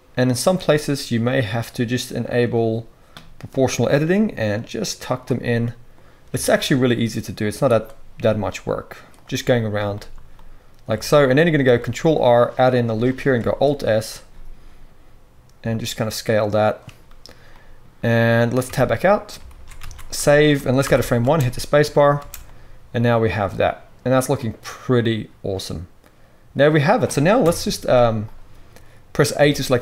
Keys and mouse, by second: 1.5 click, 1.5 middle click, 2.2 click, 2.3-7.6 middle drag, 4.0 g, 7.6 click, 7.7-11.1 middle drag, 8.2 g, 11.8 ctrl+r, 12.7 middle click, 13.4 alt+s, 18.6 Tab, 19.5 alt+a, 19.8 ctrl+s, 20.8 shift+Left, 21.2 space, 21.6-28.2 middle drag, 22.2 space, 27.4 KP_1, 28.2 click, 28.3-29.8 middle drag, 29.4 a.